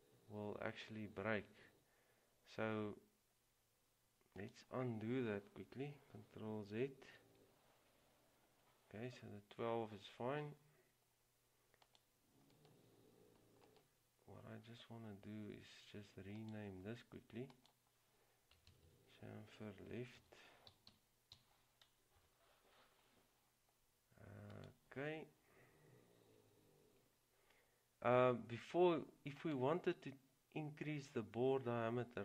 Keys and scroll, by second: 7.3 ctrl+z, 20.3-22.8 typing.